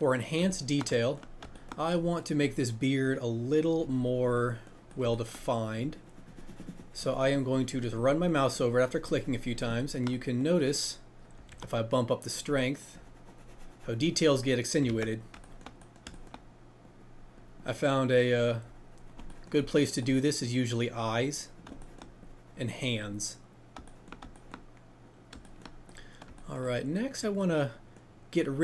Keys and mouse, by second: 4.9 middle click, 11.5 shift+f, 12.2 click, 12.5-14.2 middle drag, 26.3 shift+middle click.